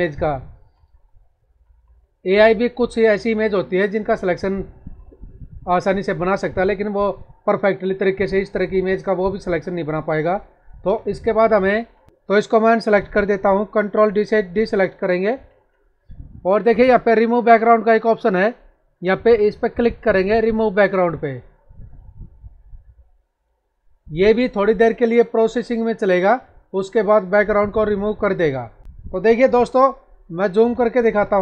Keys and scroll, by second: 8.0 ctrl+=, 10.7 ctrl+-, 15.2 ctrl+d, 30.4 ctrl+=.